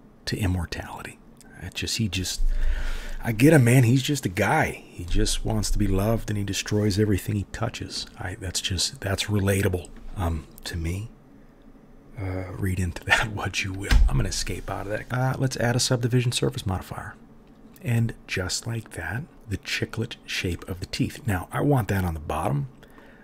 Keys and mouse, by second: 15.2-23.2 middle drag, 15.2-23.1 right drag.